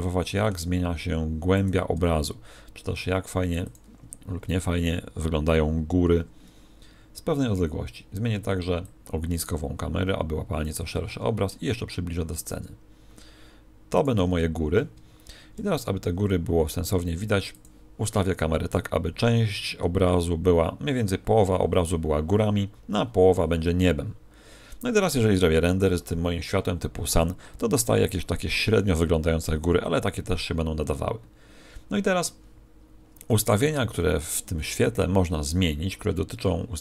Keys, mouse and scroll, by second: 1.6 click, 1.9 g, 8.8 click, 12.4 click, 14.0 click, 15.5 shift+f, 19.9-21.8 scroll up 2, 36.5 Escape.